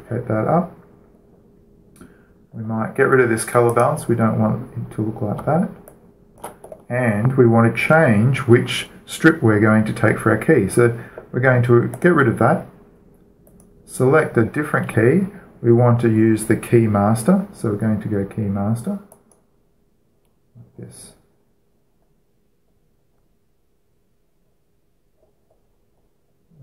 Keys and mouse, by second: 0.5-2.3 drag, 2.3-4.4 middle drag, 4.4-6.2 drag, 6.6-12.7 alt+shift+middle drag, 12.7-16.2 drag, 19.8-21.6 drag, 23.4-26.6 middle drag.